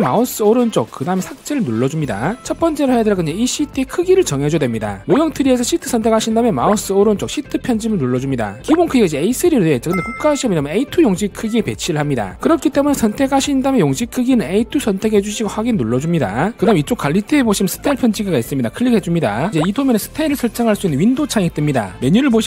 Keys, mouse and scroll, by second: 0.2 right click, 6.2 click, 6.6 right click, 8.0 click, 13.3 click, 13.6 click, 15.4 click, 16.3 click.